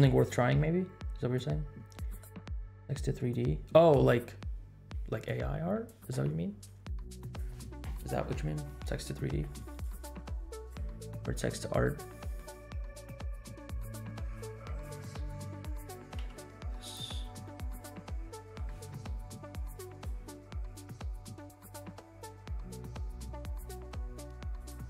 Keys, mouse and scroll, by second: 7.2 click, 9.9-11.2 drag, 11.4-12.0 scroll up 3, 12.1 middle click, 12.5-13.5 scroll up 4, 13.5 middle click, 13.9 scroll up 1, 14.4 click, 16.1 g, 17.2 scroll down 2, 17.4-18.6 middle drag, 19.6-20.1 drag, 20.3-20.9 scroll up 3, 20.9 middle click, 21.3-22.0 scroll up 5, 22.1 middle click, 23.3 g.